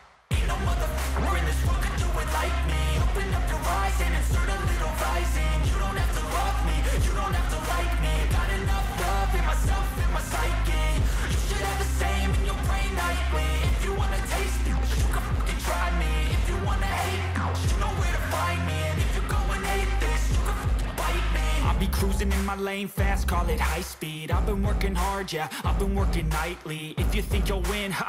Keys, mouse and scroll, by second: 0.7-1.1 scroll up 1, 1.1 right click, 25.8 click.